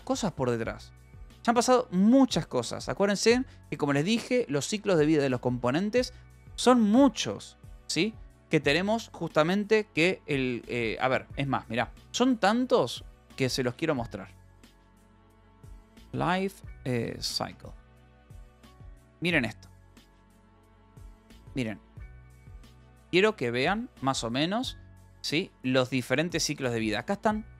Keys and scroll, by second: 13.0-17.3 typing, 17.5 Return.